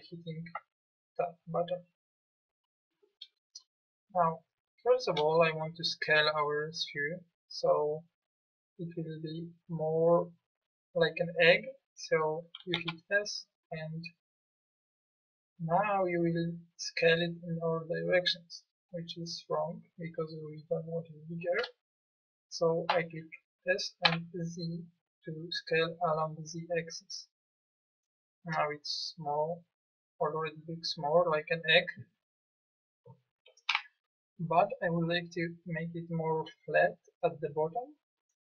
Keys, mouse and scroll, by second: 0.6 Tab, 12.7 s, 22.9 s, 33.7 KP_1.